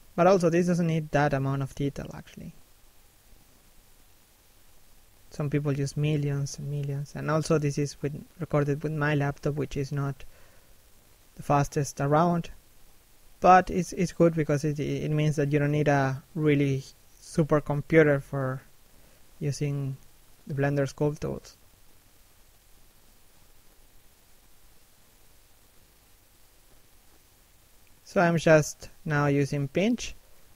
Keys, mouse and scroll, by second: 6.4 scroll down 1, 6.7 middle click, 7.8 shift+middle click, 8.3 middle click, 8.9 scroll up 1, 9.1 middle click, 9.6 click, 15.3 s, 15.9 f, 16.9 click, 19.0 scroll down 1, 19.3 middle click, 19.9 shift+middle click, 20.4 click, 21.4 middle click, 23.1 middle click, 23.6 shift+middle click, 24.1 middle click, 24.7 shift+middle click, 25.1-26.1 scroll up 1, 27.4 f, 28.3 right click.